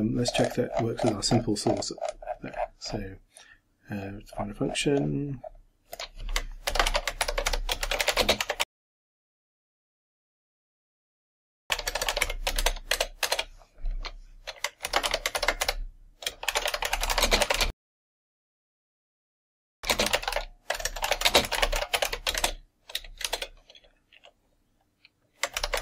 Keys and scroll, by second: 6.7 ctrl+m, 6.9 ctrl+a, 7.2 ctrl+m, 7.8 ctrl+shift+t, 8.0 ctrl+shift+h, 8.1 ctrl+shift+e, 8.2 ctrl+shift+space, 8.4 ctrl+shift+r, 8.7 ctrl+shift+a, 8.7 ctrl+shift+space, 10.0-10.9 typing, 12.6 shift+Return, 14.8 ctrl+m, 15.1 ctrl+a, 15.4 ctrl+m, 16.2-22.5 typing, 23.3 shift+Return, 25.6 ctrl+m.